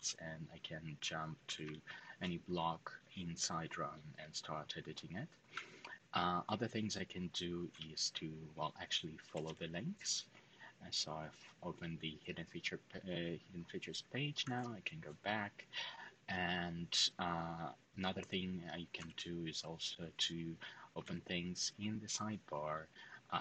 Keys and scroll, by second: 0.9-1.9 typing, 5.3 typing, 7.4 typing, 8.7-9.7 typing, 14.2 shift+s, 18.7 shift+f, 20.4-21.3 typing.